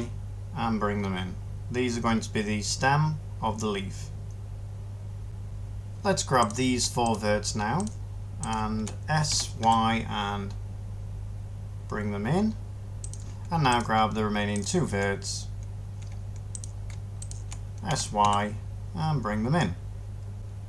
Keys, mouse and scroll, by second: 9.2 s, 9.5 y, 17.8 s.